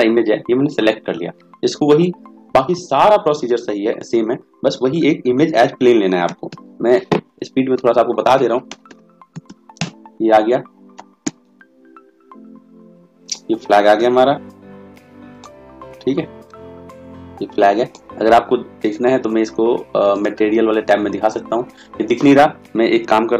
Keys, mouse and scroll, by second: 11.3 s.